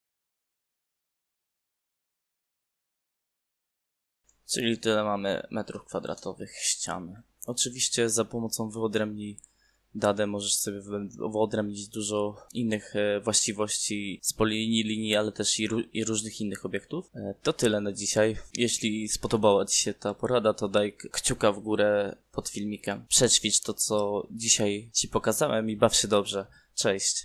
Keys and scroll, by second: 1.2 BackSpace, 1.5 =, 3.0 KP_Multiply, 4.5 Return, 6.2 m, 6.4 2, 6.6 Return.